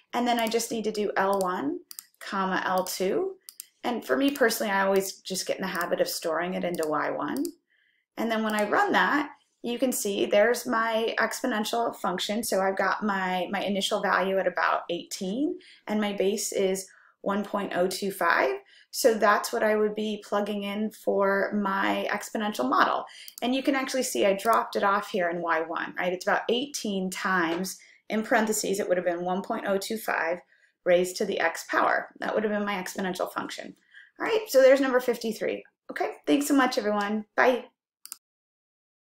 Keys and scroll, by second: 1.6 1, 2.2 ,, 3.7 2, 4.5 ,, 5.8 Right, 6.8 Return, 7.4 Return, 8.5 Return.